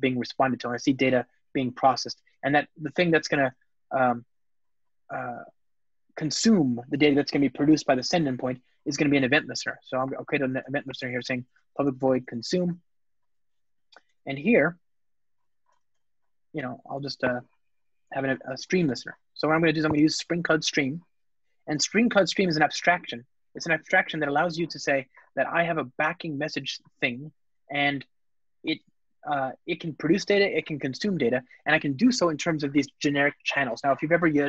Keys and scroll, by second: 3.1 Return, 10.8 Return, 19.9 Return, 26.6 alt+shift+Right, 28.7 Return, 29.5 alt+super+l.